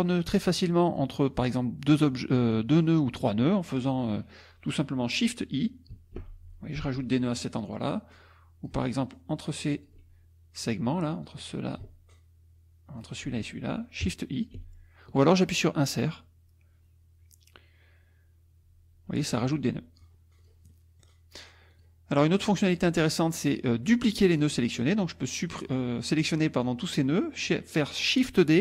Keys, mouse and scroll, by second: 0.0 click, 0.3 middle click, 1.3 click, 2.5 click, 6.2 shift+i, 7.9 click, 9.1 shift+click, 10.6 click, 11.2 click, 12.1 shift+click, 14.6 shift+i, 18.6 Insert, 20.4 click, 20.7 middle click, 21.7 click, 22.3 middle click, 23.1 middle click, 23.9 middle click, 25.0-26.6 drag, 27.1 middle click.